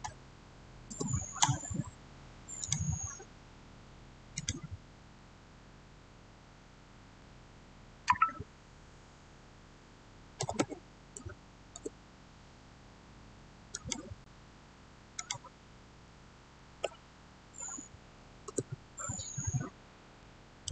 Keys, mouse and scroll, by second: 1.5 Return, 2.5 click, 10.1-11.0 typing, 10.3 click, 11.6 Return, 13.6 click, 16.5 typing, 17.8 8, 18.3 Return, 19.6-20.1 scroll down 1, 20.1-20.7 middle drag.